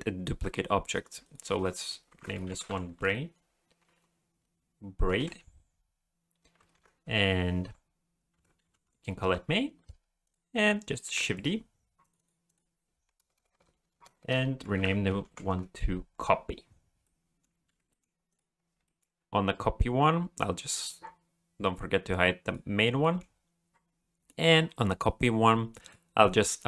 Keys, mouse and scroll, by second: 1.2 click, 1.4 click, 10.2 click, 11.1 shift+d, 12.0 click, 12.2 click, 13.4-14.3 typing, 17.0 middle click, 17.7 alt+a, 17.9 middle click, 18.3 click, 18.8 middle click, 20.6 click, 22.4 click, 23.0 middle click, 23.7 scroll down 2, 24.7-25.2 scroll up 4, 25.8 click.